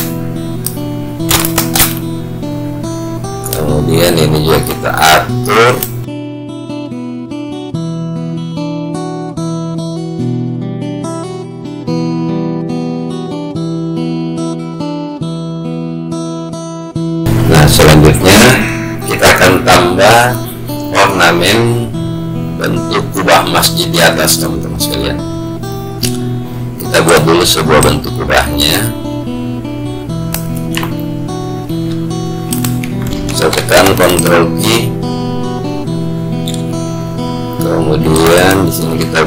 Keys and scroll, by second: 34.3 ctrl+q.